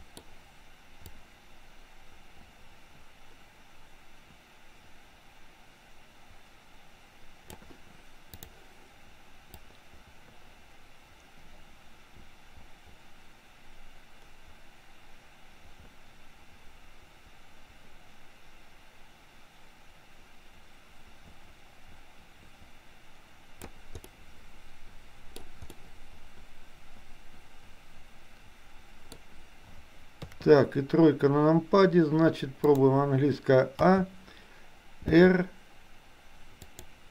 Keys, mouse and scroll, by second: 1.3-7.7 drag, 9.7-23.7 drag, 23.9-25.4 middle drag, 25.7-29.1 middle drag, 30.2 KP_3, 33.8 a, 35.2 r.